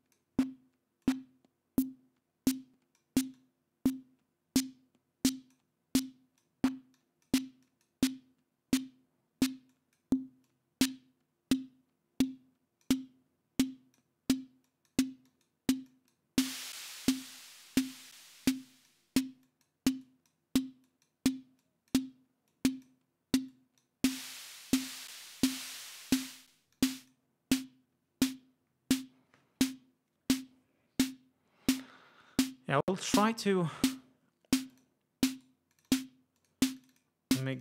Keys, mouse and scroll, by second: 1.1-3.3 drag, 3.5-5.8 drag, 6.1-6.7 drag, 7.1 click, 7.7 click, 9.8-10.3 drag, 10.6-13.1 drag, 13.7-14.3 drag, 14.8-15.2 drag, 15.4 click, 16.0-16.4 drag, 16.8 click, 17.9-18.4 drag, 18.8-19.2 drag, 19.6 click, 20.1-20.6 drag, 21.0 click, 21.7-22.2 drag, 22.6-23.2 drag, 23.6-24.1 drag, 25.1 click, 25.9 click, 26.9 click, 34.8 click, 35.4 right click, 35.8 click, 36.4 click, 36.8 click, 37.5 click.